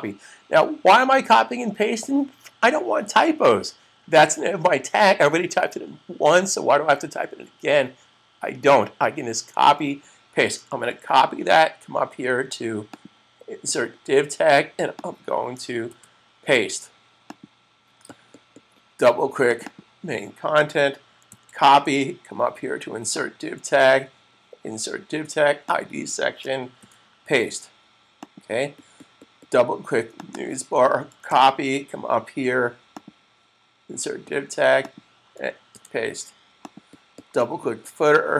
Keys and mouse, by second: 10.7 super+c, 12.7 click, 15.7 super+v, 17.3 click, 19.6 double click, 21.1 super+c, 23.0 double click, 26.6 super+v, 28.2 click, 30.3 double click, 31.2 super+c, 32.8 double click, 35.7 super+v, 36.7 click.